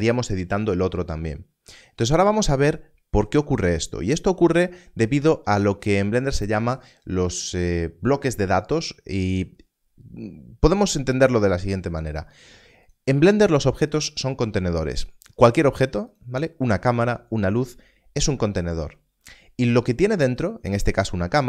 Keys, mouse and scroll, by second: 12.8 click, 16.1 click, 20.3 click.